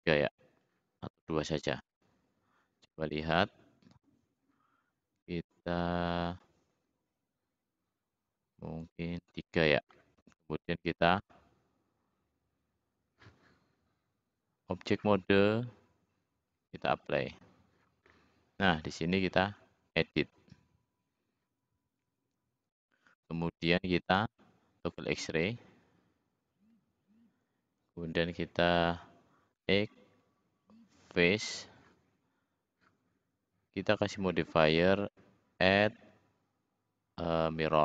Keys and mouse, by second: 2.5 drag, 29.4 x.